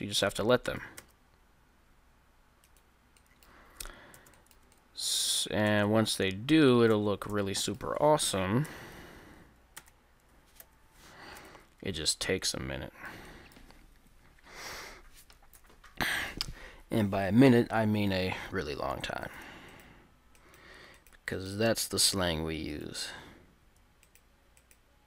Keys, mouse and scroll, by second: 1.0 w, 4.2 a, 5.7 Tab, 7.0 Tab, 7.4 Tab, 8.7 Tab, 9.8 a, 10.6 ctrl+n, 11.4 a, 11.5 Tab, 12.1 middle click, 13.9 Tab, 15.6 KP_1, 16.4 middle click, 18.6 middle click, 19.2 right click, 22.2 g, 22.4 right click, 22.8 right click, 22.8 g.